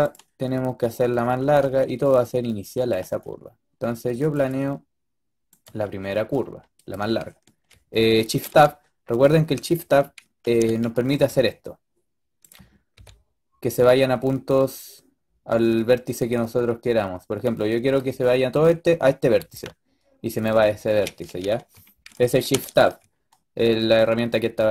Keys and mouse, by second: 0.0-1.5 middle drag, 1.5 e, 3.0 e, 4.4 e, 5.5 e, 8.3 shift+Tab, 10.3 shift+Tab, 11.0 g, 12.8 g, 19.2 g, 21.3 ctrl+z, 22.4 shift+Tab.